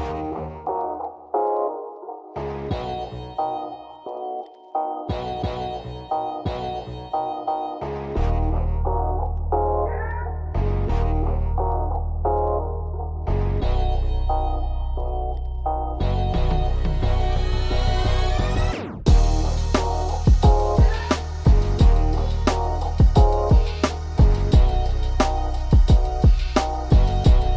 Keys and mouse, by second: 1.3 right click, 3.6 x, 5.5 Return, 13.3-14.7 right drag, 14.7 x, 16.1 click, 21.8 right click, 24.5 shift+right click, 25.6-27.5 shift+right drag.